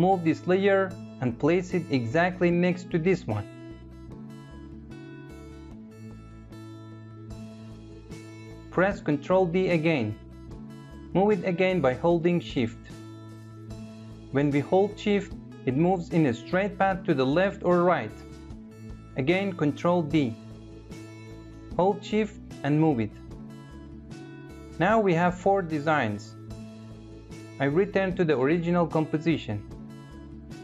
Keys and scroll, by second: 8.3 ctrl+d, 18.9 ctrl+d.